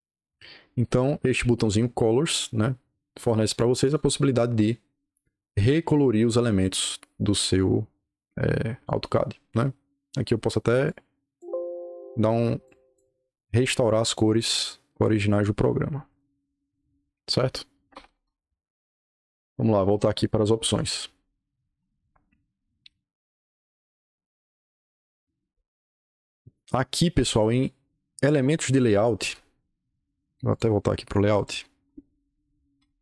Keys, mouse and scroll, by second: 0.8 scroll down 2, 1.0-1.7 scroll up 2, 3.1 click, 3.7 click, 4.5 click, 5.5 click, 6.0-6.8 scroll up 2, 7.0-8.6 scroll up 2, 9.8-10.2 scroll down 2, 10.2-10.8 scroll up 2, 10.8 click, 12.6 click, 13.9 click, 14.9 click, 16.0 click, 16.5-17.7 scroll up 2, 17.8 o, 18.2 Return, 26.9-27.5 drag, 30.4 click, 31.3 click, 31.5 scroll up 2, 32.5-33.0 typing.